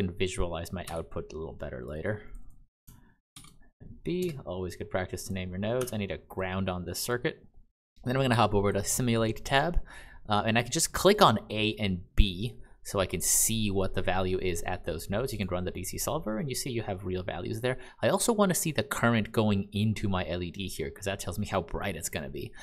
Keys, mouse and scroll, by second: 0.8 n, 1.7 click, 3.2 shift+b, 4.1 Return, 5.1 click, 5.7 g, 6.2 click, 7.0 click, 11.1 click, 12.3 click, 21.4 click.